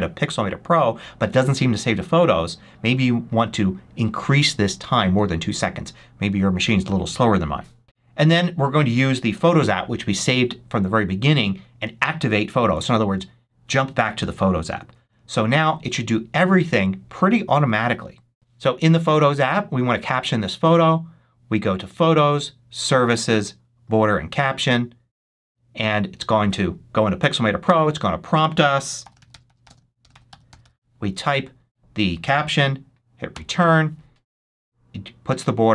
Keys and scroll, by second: 16.5 super+s, 28.7-31.0 typing, 33.2 Return.